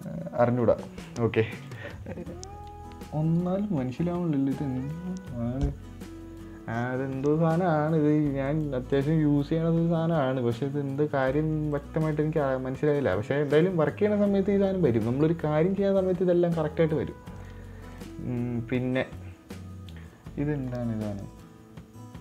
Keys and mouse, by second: 2.2 click, 9.5-11.8 drag, 12.2-12.6 drag, 13.4-14.1 drag, 17.8 click, 18.4 click.